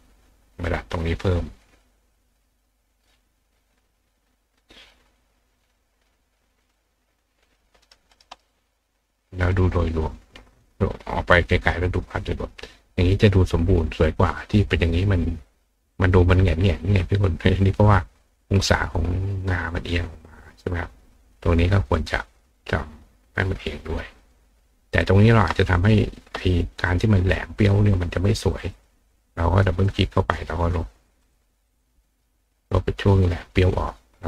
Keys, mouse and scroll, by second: 0.5 click, 1.8-2.9 drag, 4.1 click, 5.7 click, 6.6 click, 7.5 click, 7.8 right click, 8.1 click, 8.3 click, 9.2 click, 10.5 click, 10.9 click, 23.2 click, 23.9 click, 25.0 click, 26.9 click, 28.5 click, 28.7 click, 29.5 click, 29.8 click, 31.0 click, 31.3 click, 31.6 click, 32.8-33.2 drag.